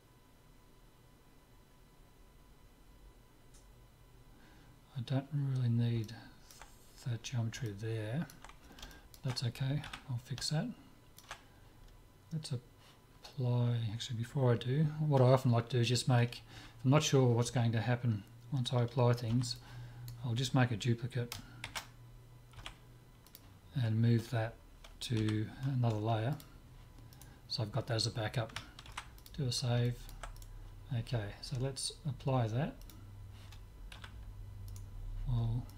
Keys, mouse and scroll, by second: 6.1-12.5 middle drag, 9.9 z, 13.2-15.5 middle drag, 16.6 a, 19.4 b, 21.8 shift+d, 25.3 m, 27.2-29.0 right drag, 29.0 ctrl+s, 29.0 click, 29.4 middle click, 29.9-31.7 middle drag, 30.4-31.7 drag, 31.7 right click, 32.9-34.6 drag, 34.0 z, 34.8-35.7 right drag.